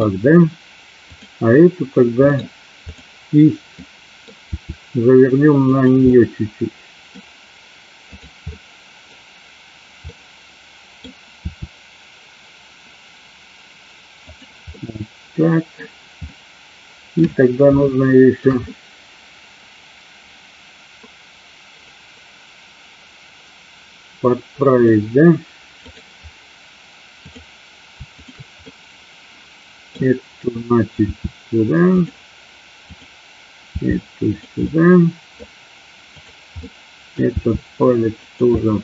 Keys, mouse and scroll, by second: 1.1 click, 2.4 middle click, 2.9 click, 3.9 middle click, 4.6 r, 5.8 click, 6.2 middle click, 8.2 click, 8.5 middle click, 10.1 middle click, 11.5 r, 14.4 click, 14.8-15.9 middle drag, 16.4-17.3 middle drag, 17.9-18.4 shift+middle drag, 18.8-24.9 middle drag, 26.0-27.6 drag, 28.3 shift+click, 28.8-30.0 middle drag, 31.1 r, 32.9 click, 33.7 r, 34.4 click, 34.8 middle click, 36.8 middle click, 37.4 r, 38.3 click, 38.7-38.8 middle drag.